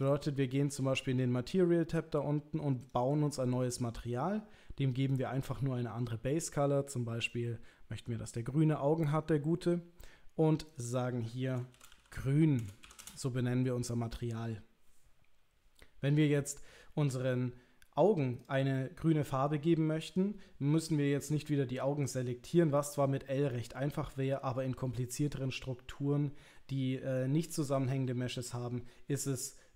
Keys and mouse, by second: 0.0 click, 3.0 drag, 5.1 click, 10.7 click, 10.8-15.4 drag, 18.4 click, 18.7 middle click, 20.1 click.